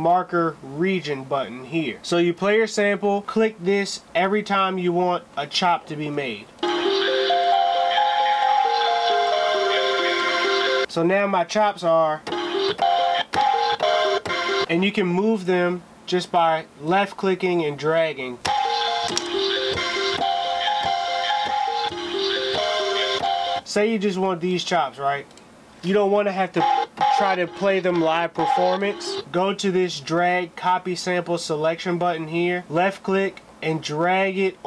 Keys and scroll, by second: 1.9 space, 6.0 Return, 6.2 space, 10.8 space, 33.5 d.